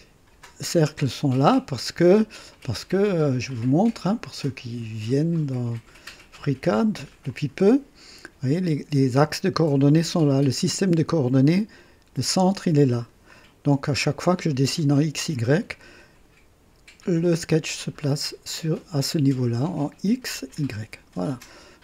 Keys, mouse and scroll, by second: 0.8-2.5 drag, 3.4 click, 6.3 click, 7.2-9.0 drag, 13.3-14.2 drag, 17.5-19.4 drag.